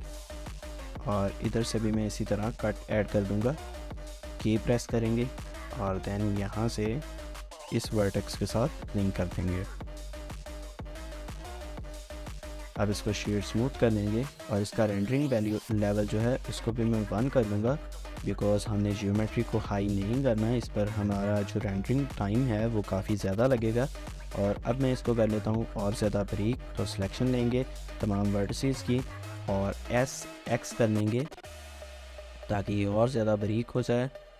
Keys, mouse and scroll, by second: 0.1 shift+middle click, 2.0 scroll down 1, 2.3 shift+middle click, 8.8 Return, 9.5 scroll down 1, 9.7 middle click, 10.0 Tab, 10.5 Tab, 10.6 shift+middle click, 12.7 right click, 13.6 middle click, 18.5 middle click, 19.2 scroll down 1, 19.5 shift+middle click, 20.5 typing, 23.5 shift+middle click, 25.1 Tab, 25.9 Tab, 25.9 typing, 29.6 typing, 31.3 typing, 33.7 typing, 34.2 Tab.